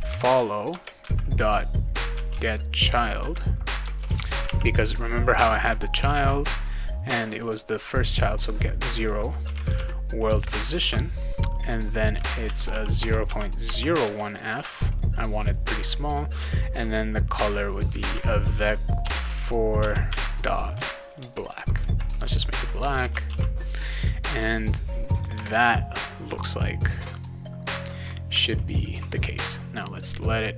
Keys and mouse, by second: 0.0-0.6 typing, 0.7 Return, 1.7-4.4 typing, 3.8 Return, 6.2 ., 9.2-10.8 typing, 10.2 Return, 12.2-14.5 typing, 17.6-20.7 typing, 21.2 Return, 22.1 l, 22.8 BackSpace, 23.1 ctrl+;, 23.3 ctrl+s, 25.1 click, 25.3 Return, 28.3 alt+Tab.